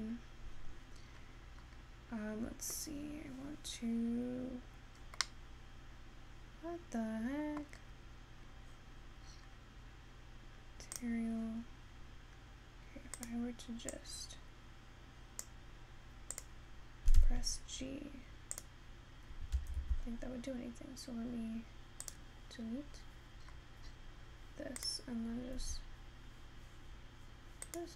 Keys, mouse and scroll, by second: 5.3-7.8 middle drag, 11.2 click, 22.1-24.9 drag.